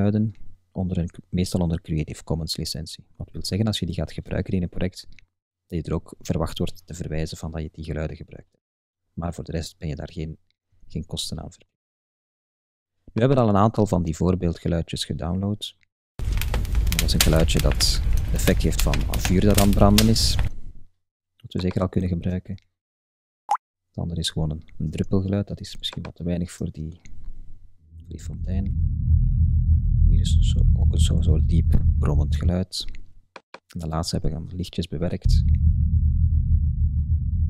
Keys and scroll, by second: 10.8 super+Tab.